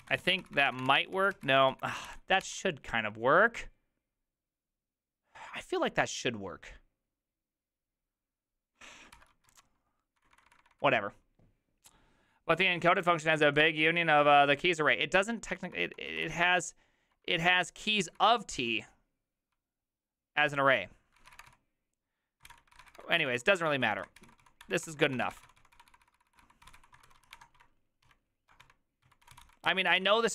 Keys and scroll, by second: 0.0-2.6 typing, 9.3 ctrl+c, 9.3-10.6 typing, 16.1-17.6 typing, 19.3-30.3 typing.